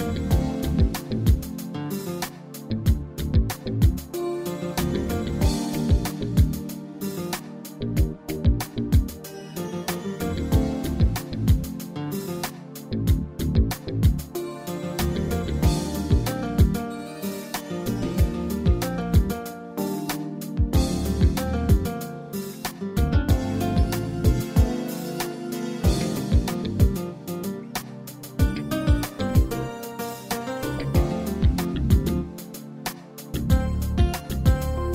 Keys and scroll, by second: 19.8 ctrl+c.